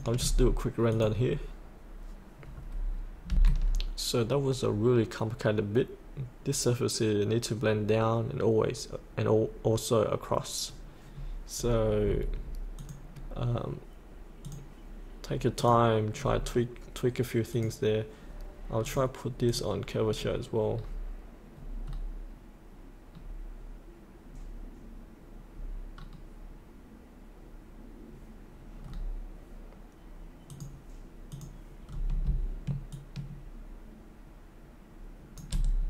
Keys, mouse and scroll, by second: 3.2 F8, 11.1-11.5 scroll down 1, 11.6-12.0 scroll up 1, 12.0-12.5 scroll down 1, 12.8 click, 16.1-17.5 scroll down 1, 17.5 click, 20.0-22.2 scroll down 1, 22.2-23.2 scroll up 1, 23.2-24.3 scroll down 1, 24.3-24.9 scroll up 1, 26.0-30.5 scroll down 1, 30.5 click, 31.8 scroll down 1, 32.9-35.3 shift+drag.